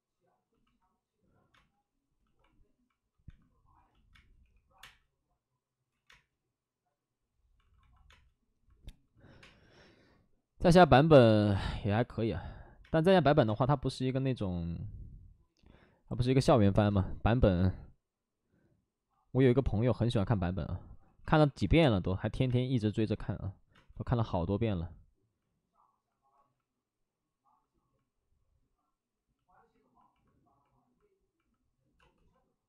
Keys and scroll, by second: 1.5 space, 3.2-4.7 typing, 5.8 ctrl+z, 6.0 space, 7.5 alt+s, 8.0 space, 9.2 5, 9.3 space, 11.1 3, 12.0 alt+s, 12.8 space, 16.8 space, 17.5 space, 21.0 ctrl+z, 21.3 2, 22.4 space, 23.7 space, 26.3 ctrl+z, 32.1 space.